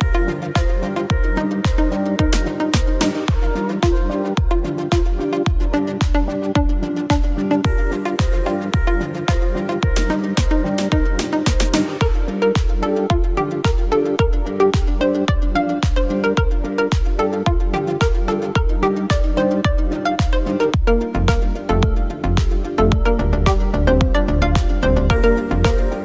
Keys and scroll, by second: 3.4 shift+space, 6.7 shift+space, 19.1 Down.